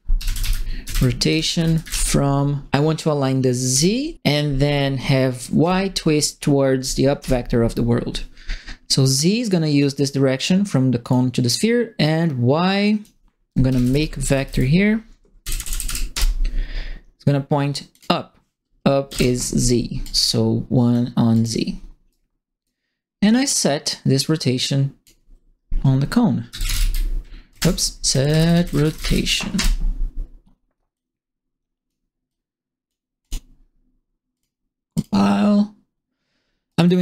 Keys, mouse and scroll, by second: 0.0-2.3 typing, 3.7 z, 5.6 y, 7.1 Return, 9.2 click, 10.3 click, 12.8 click, 13.4-14.9 typing, 15.4 Down, 15.5 Down, 15.6 Down, 15.8 Down, 16.1 Return, 17.9 click, 19.0 KP_1, 19.5 middle click, 20.0 click, 21.3 click, 22.0 right click, 23.8-25.0 drag, 26.4 c, 26.7 e, 27.5 ctrl+BackSpace, 27.8-29.5 typing, 30.9 click, 32.2 click, 33.2 click, 34.3 click, 34.9 click, 36.6 right click.